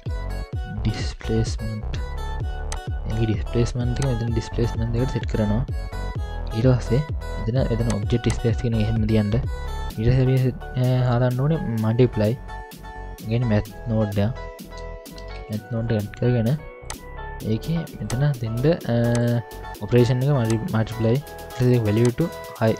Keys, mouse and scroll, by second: 4.0-5.1 drag, 7.9 click, 12.1 middle click, 13.1 ctrl+alt+a, 18.1 drag, 19.2-20.5 drag, 22.0-22.7 drag.